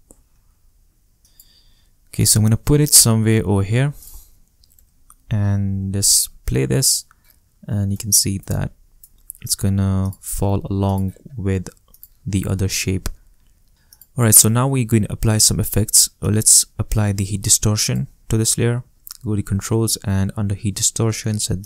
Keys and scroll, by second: 0.8 shift+space, 1.1 shift+space, 4.5 shift+0, 4.7 shift+Return.